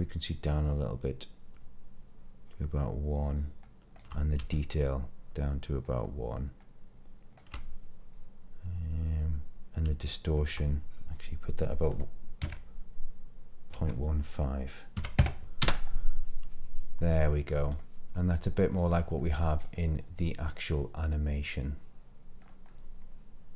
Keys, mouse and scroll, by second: 4.5-7.3 shift+drag, 10.2-15.2 shift+drag, 15.6 space, 17.0-17.5 middle drag, 17.6 click, 18.1-18.7 middle drag, 18.8 scroll up 2, 19.1-19.7 middle drag, 19.9 scroll down 2, 20.3-22.4 middle drag, 22.6-23.5 middle drag.